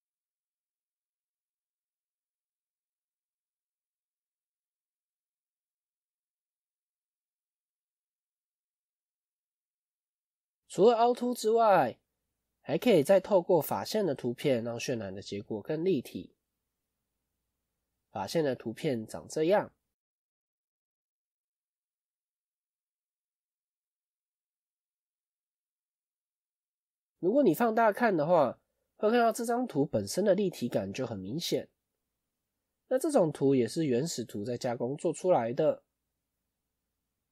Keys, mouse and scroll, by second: 7.3 scroll up 3, 7.9 scroll down 1.